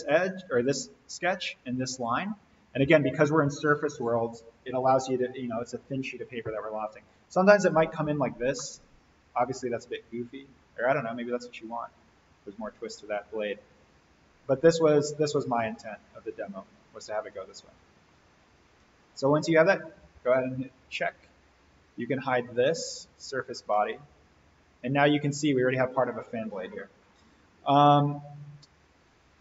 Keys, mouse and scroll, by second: 7.0-7.7 drag, 8.6-13.3 middle drag, 14.5-15.1 click, 15.6-18.0 middle drag, 19.7 click, 21.0 right click, 22.5 click, 23.7-27.4 middle click, 28.2 click.